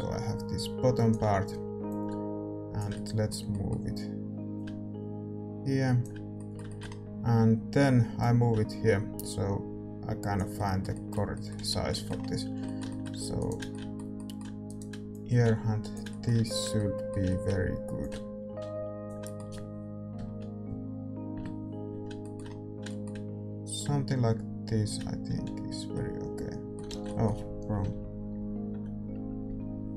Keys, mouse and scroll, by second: 2.9-9.7 middle drag, 7.2 Tab, 8.2-10.5 drag, 10.5-15.1 middle drag, 11.5 z, 12.5 Tab, 13.1 a, 13.3-16.4 right drag, 15.1-20.1 drag, 19.2-21.3 middle drag, 20.1 KP_1, 20.6 KP_3, 21.3 KP_5, 22.2-24.8 middle drag, 23.7-25.9 drag, 25.2 z, 25.9-29.1 middle drag, 26.8 ctrl+z, 27.8-29.4 typing.